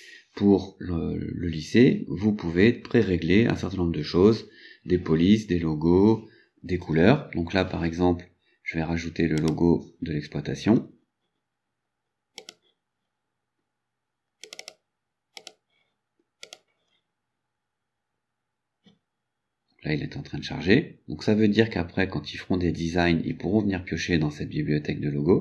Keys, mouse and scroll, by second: 9.4 click, 12.4 click, 14.5 click, 15.4 click, 16.5 click.